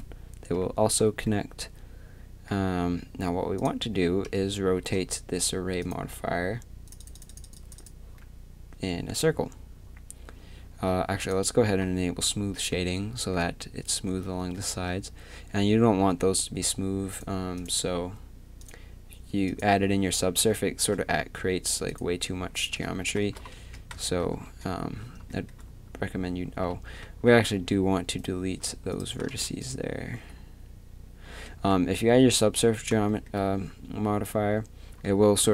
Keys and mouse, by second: 0.8 middle click, 0.8 z, 3.6 click, 4.2 KP_3, 8.2-11.2 middle drag, 12.6-14.6 middle drag, 17.1-20.5 drag, 21.9-23.5 drag, 22.6 z, 23.2 z, 23.6 Tab, 27.6 z, 28.2-29.3 right drag, 29.3 x, 30.1 z, 31.6 Tab.